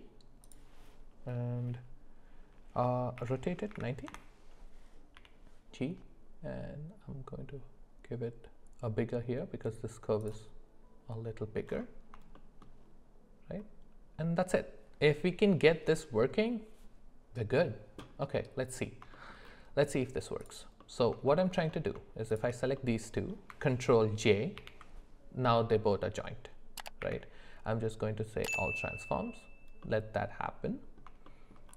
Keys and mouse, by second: 3.2 r, 5.1 g, 12.3 shift+middle drag, 18.2 middle click, 19.1 shift+middle click, 20.4 click, 20.8 middle click, 21.3 shift+middle click, 22.3 shift+click, 22.8 middle click, 24.6 ctrl+j, 27.0 q, 29.8-31.0 middle drag, 31.3 shift+middle drag.